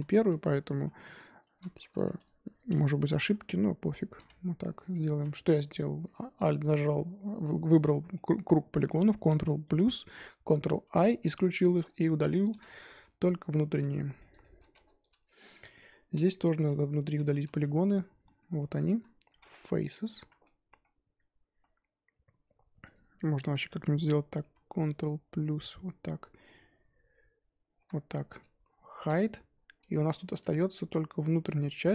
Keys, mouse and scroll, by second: 1.6 z, 2.2 alt+click, 3.1 ctrl+KP_Add, 4.1 ctrl+i, 5.1 ctrl+z, 5.7 alt+click, 6.1-9.6 middle drag, 9.6 ctrl+KP_Add, 10.8 ctrl+i, 12.1 z, 13.4-13.7 scroll down 3, 13.7 z, 13.9-14.7 middle drag, 14.7 Tab, 15.0 click, 15.2 shift+middle drag, 15.4-15.9 scroll up 4, 16.0 Tab, 16.2-16.8 middle drag, 16.8 z, 17.9 alt+click, 18.4 scroll down 1, 18.6-18.9 middle drag, 18.9 z, 20.4 middle click, 20.8-21.5 scroll up 1, 21.5 z, 22.9 alt+click, 23.2-24.4 middle drag, 24.4 ctrl+KP_Add, 25.5 KP_Add, 28.9 h, 29.9 middle click, 30.3 a, 30.5-31.4 scroll down 2, 31.4 scroll down 1, 31.4 middle click, 31.7 scroll up 2, 31.8 z.